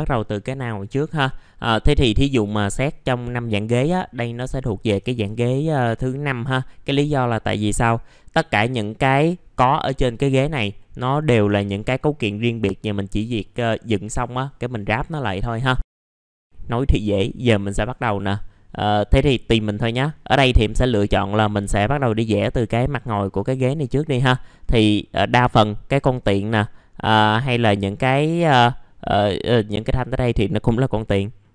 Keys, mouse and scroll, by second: 1.2-2.2 scroll up 1, 2.2 click, 6.9 middle click, 15.9 scroll up 1, 16.2 middle click, 18.7-19.1 scroll down 1, 19.1 middle click, 19.6 scroll up 1, 21.5 click, 21.9-23.5 scroll down 1, 23.5-23.9 scroll up 1, 23.9 middle click, 24.3-25.0 scroll down 1, 25.0 middle click, 25.2-25.9 scroll down 1, 26.6 middle click.